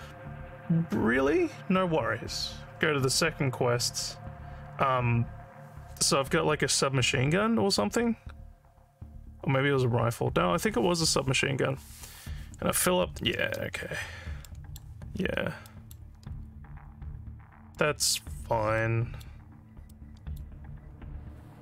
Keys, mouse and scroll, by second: 13.8 alt+scroll down 2, 14.4 alt+middle click, 15.7 alt+middle click, 17.7 alt+middle click, 18.3 alt+scroll down 2, 18.8 alt+middle click, 19.9 alt+middle click.